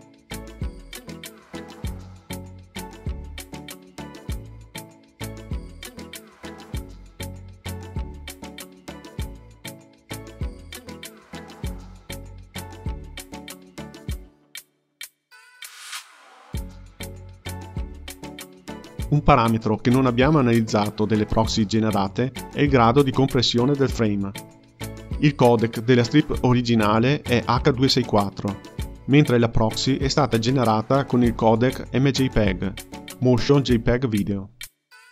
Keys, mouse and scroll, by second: 2.5 click, 3.3 click, 4.3 click, 7.2-11.9 drag, 11.9 KP_0, 13.6 space, 17.6 space.